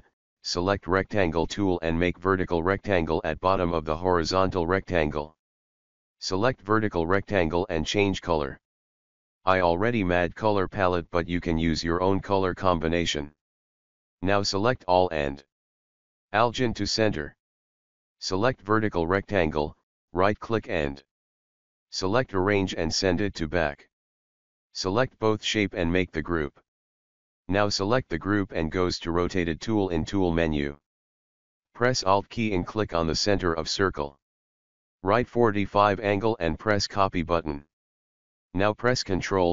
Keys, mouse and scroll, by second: 5.2-17.6 drag, 22.4 right click, 23.6-28.8 drag, 28.8 right click, 29.9 click, 38.0 ctrl+d.